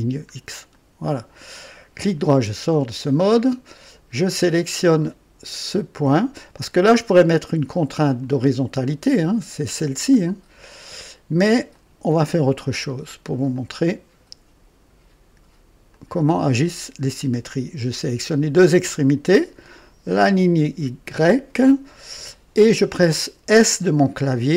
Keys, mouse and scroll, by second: 0.7 right click, 1.5 right click, 5.7 click, 6.5 click, 8.1 click, 11.6 click, 13.4 click, 15.8 click, 20.0 click.